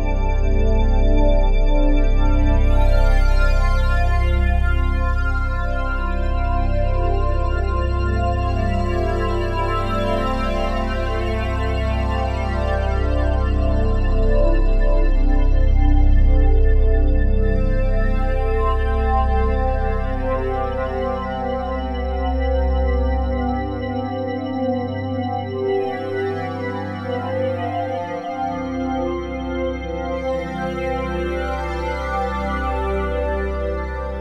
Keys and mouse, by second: 0.0 Escape, 1.1-3.7 drag, 3.7 g, 4.7 Escape, 5.4-7.7 ctrl+alt+drag, 7.7 typing, 7.9-9.3 alt+drag, 9.4 click, 11.3 click, 12.2-12.6 typing, 14.6-15.4 typing, 16.6 click, 17.0 drag, 17.8-18.2 drag, 18.5-18.8 shift+drag, 19.4 click, 19.8-21.9 typing, 19.9 click, 20.0-21.0 drag, 22.6 Right, 22.9 Return, 24.3 ctrl+z, 25.7-28.8 drag, 29.0 ctrl+a, 30.2-31.0 drag, 31.4 ctrl+s, 33.1-34.2 alt+drag.